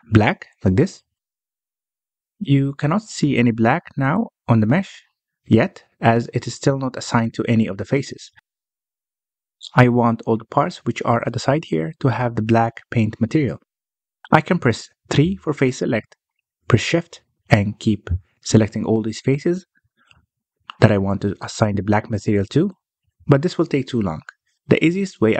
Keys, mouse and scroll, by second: 0.0 click, 1.0 click, 4.2-5.9 middle drag, 5.9 scroll down 1, 6.0-7.2 middle drag, 7.2 scroll up 1, 7.5-8.4 middle drag, 8.4-8.9 scroll up 1, 8.9-10.6 middle drag, 10.6-11.6 scroll down 1, 11.6 click, 14.1 click, 14.5 Tab, 15.2-16.5 middle drag, 16.5 3, 16.9 click, 17.3-18.1 scroll up 1, 18.1 shift+click, 19.2 shift+click, 19.7-21.3 middle drag, 21.3 shift+click, 21.7 shift+click, 22.2 shift+click, 22.5 shift+click, 23.0-23.9 scroll down 3, 23.9 middle click, 24.6-25.2 scroll up 2, 25.2 alt+a.